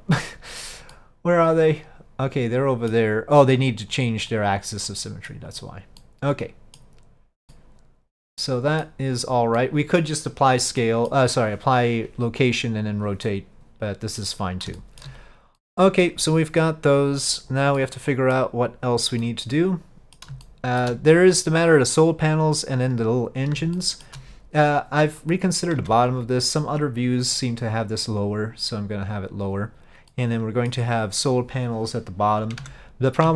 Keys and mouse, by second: 1.0-3.0 middle drag, 3.9 click, 4.4 click, 5.0-5.4 middle drag, 6.1-6.9 middle drag, 7.6-8.9 middle drag, 9.7-10.1 middle drag, 10.9 middle click, 13.4-14.3 middle drag, 14.9 shift+middle drag, 15.7-16.1 middle drag, 17.9 middle click, 19.3-20.3 middle drag, 20.5-20.9 shift+middle drag, 23.8 shift+middle drag, 25.3 click, 25.9 Tab, 26.2 click, 28.2-29.6 drag, 30.3 middle click, 32.7 Tab.